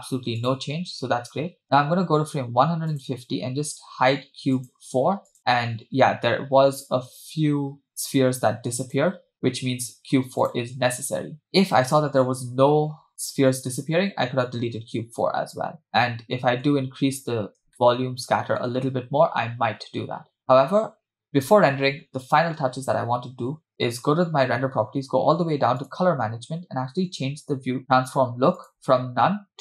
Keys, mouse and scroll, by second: 0.5 click, 3.1 click, 4.7 click, 7.9 click, 9.1 click, 10.4 click, 15.0-16.0 scroll down 6, 15.1-15.5 middle drag, 16.1-17.1 shift+middle drag, 17.1-17.5 scroll down 1, 17.9-18.7 shift+middle drag, 19.4-20.0 scroll down 1, 20.4 scroll down 1, 23.9 click, 24.5-25.8 scroll down 3, 25.8-27.8 scroll down 5, 25.8 click, 28.6-29.6 drag.